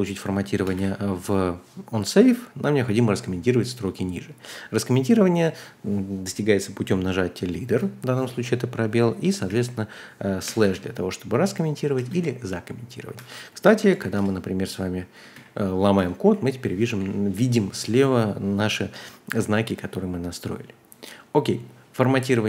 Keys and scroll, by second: 0.0-0.7 typing, 7.6 typing, 9.4-10.6 typing, 11.9 typing, 13.1-17.8 typing, 19.6 typing.